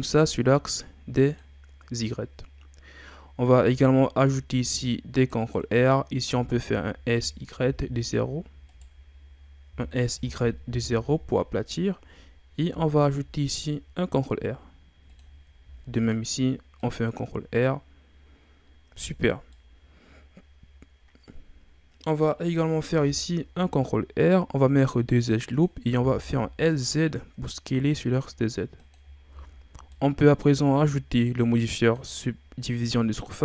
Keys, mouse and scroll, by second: 3.6 ctrl+r, 6.3 s, 9.7 s, 12.6 ctrl+r, 15.6 ctrl+r, 18.9 z, 19.1-19.5 scroll down 2, 19.5-22.7 middle drag, 22.9 ctrl+r, 25.4 click, 26.0 s, 29.3 Tab, 29.9-31.8 middle drag, 31.8 click.